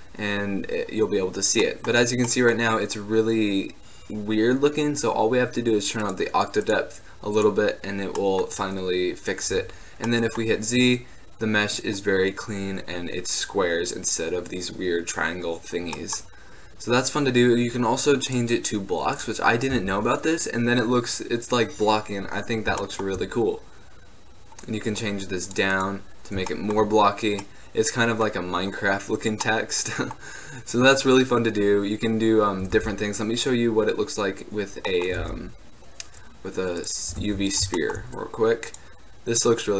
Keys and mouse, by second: 5.1-6.2 middle drag, 6.2-8.3 drag, 8.3-9.3 middle drag, 9.8 z, 19.9 z, 26.3-27.6 drag, 27.6-32.9 middle drag, 32.9-35.0 drag, 32.9 shift+a, 35.3 shift+a, 37.2 g, 37.9-39.7 drag.